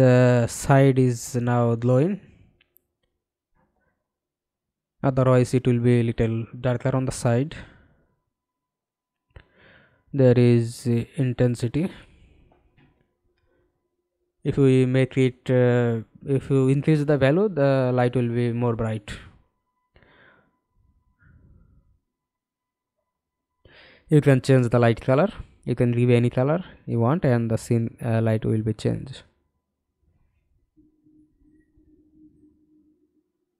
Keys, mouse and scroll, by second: 32.6-33.5 scroll down 4.